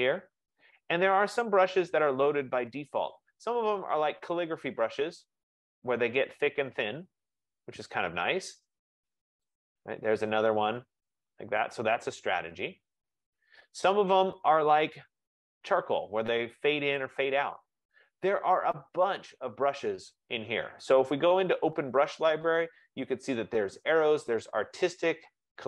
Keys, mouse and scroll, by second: 1.4 click, 3.2 click, 4.7 click, 9.7 F15, 14.9 click, 19.5 click.